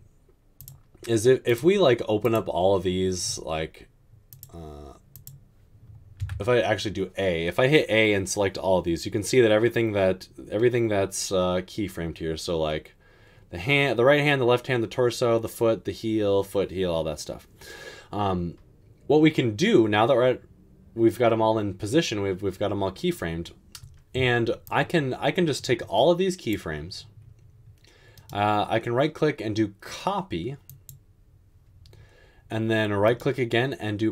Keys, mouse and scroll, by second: 6.3 typing.